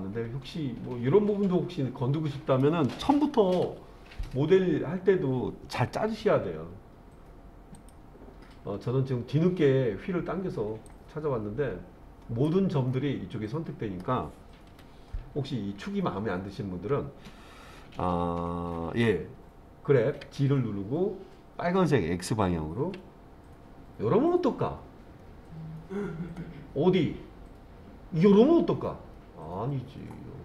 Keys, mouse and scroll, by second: 3.6 KP_1, 6.2 z, 8.7-10.8 scroll up 3, 10.9-12.5 drag, 12.9-14.0 middle drag, 14.7 KP_1, 20.2 g, 22.8 x.